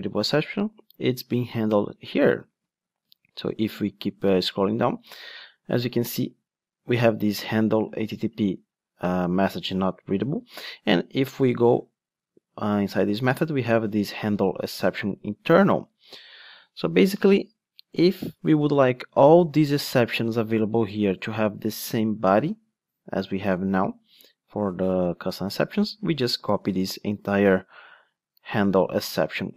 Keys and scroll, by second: 2.4 super+c, 10.3 super+b, 15.5 super+b, 26.4 super+c, 29.1 ctrl+Tab.